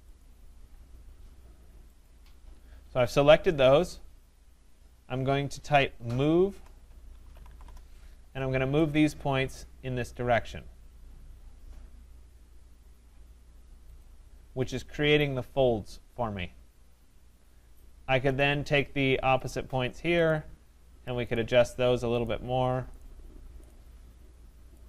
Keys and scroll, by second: 7.6 Return.